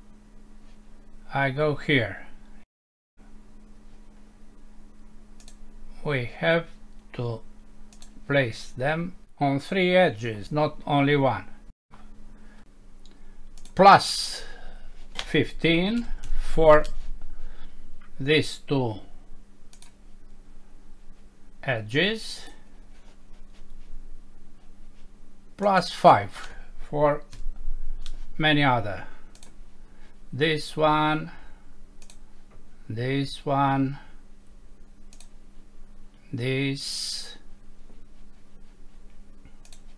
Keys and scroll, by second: 35.3 5.